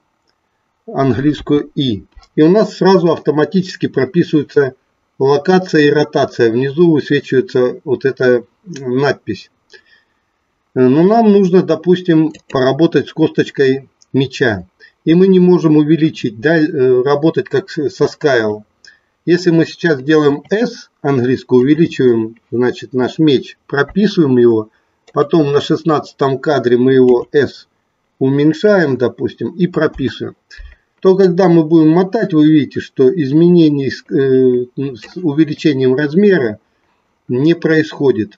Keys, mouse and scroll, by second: 1.3 i, 20.3 s, 21.6 click, 23.8 i, 25.1-25.4 drag, 27.1 s, 28.5 click, 29.8 i, 31.3-35.2 drag.